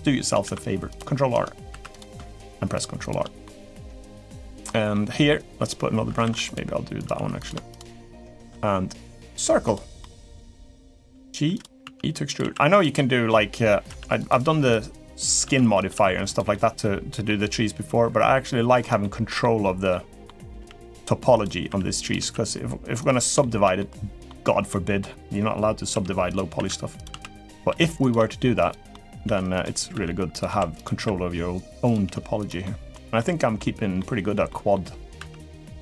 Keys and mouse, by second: 0.2 ctrl+r, 1.5 3, 1.7 click, 2.2 shift+click, 3.2 middle click, 4.0 middle click, 4.7 middle click, 6.1 ctrl+r, 6.9 3, 7.5 shift+click, 9.8 middle click, 10.5 middle click, 10.9 g, 11.6 e, 12.2 s, 12.7 middle click, 13.6 r, 14.1 g, 15.2 e, 15.7 s, 16.3 middle click, 18.0 r, 18.8 middle click, 19.7 middle click, 20.3 g, 21.4 r, 21.9 s, 23.2 shift+middle click, 23.6 middle click, 24.5 middle click, 25.7-27.9 typing, 28.7 middle click, 29.3 g, 29.7 e, 30.2 s, 30.7 r, 31.8 g, 32.4 middle click, 32.9 middle click, 33.7 middle click, 34.2 middle click, 34.9 e, 35.6 s.